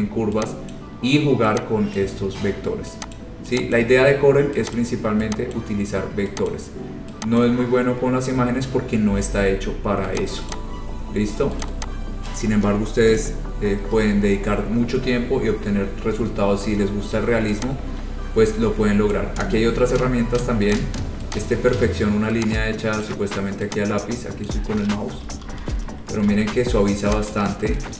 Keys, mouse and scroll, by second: 0.9 click, 2.2 click, 3.4 click, 3.9 click, 4.9 click, 5.7 click, 6.7 click, 7.6 click, 8.1-8.6 scroll, 8.9-9.3 scroll, 10.4 click, 10.7 click, 10.8-11.2 scroll, 11.8 click, 12.5 click, 13.3 Delete, 13.6-15.4 scroll, 14.2 middle click, 19.2 click, 20.9 click, 21.9 click, 23.2 click, 24.7 click, 25.4 ctrl+z, 25.6 ctrl+z, 25.8 ctrl+z, 26.4 ctrl+z, 26.7 scroll.